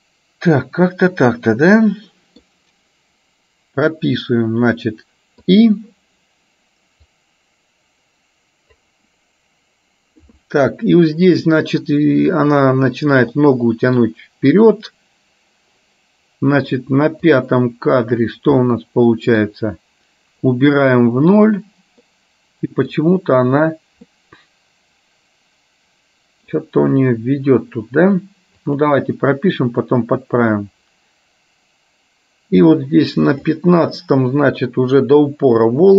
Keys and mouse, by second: 0.7-2.4 middle drag, 5.6 click, 7.3-8.9 drag, 13.4 middle click, 17.6 click, 18.7 middle click, 20.7 click, 22.2 middle click, 24.1-26.6 middle drag, 28.8 click, 29.9-33.7 drag, 35.2 click.